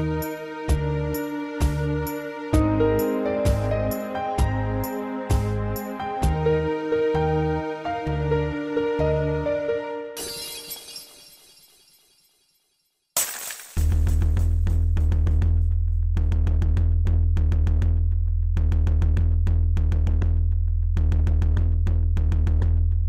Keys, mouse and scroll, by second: 0.8-3.4 typing, 4.1 Escape, 5.1-5.6 typing, 6.3 Escape, 6.8 scroll up 3, 7.1 shift+middle click, 7.4 scroll up 1, 7.9 g, 9.4-10.8 typing, 9.9 click, 11.1 Return, 11.8-12.1 scroll down 3, 12.4 middle click, 12.8 scroll up 3, 13.4 middle click, 14.1 scroll up 1, 14.6 shift+middle click, 14.9 middle click, 15.1 scroll up 2, 15.5 shift+middle click, 15.7 middle click, 15.9 middle click, 17.3 click, 18.6 Tab, 20.1 click, 20.2 click, 20.6 shift+middle click, 21.4 7, 22.0 Tab, 22.3 scroll down 2.